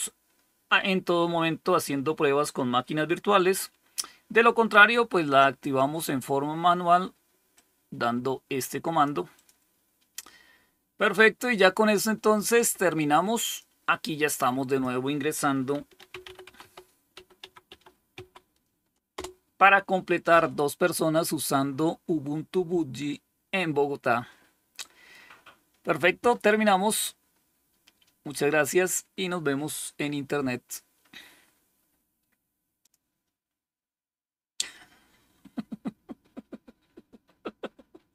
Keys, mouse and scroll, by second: 7.4-8.9 drag, 9.2 click, 12.5 click, 13.3 click, 14.6 click, 15.4-18.5 typing, 19.0 Return, 32.7 click.